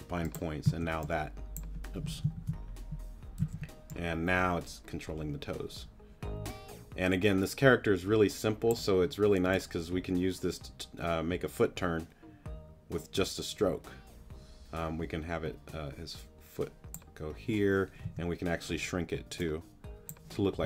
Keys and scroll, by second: 0.6 x, 2.3 super+z, 3.4 z, 18.0 t.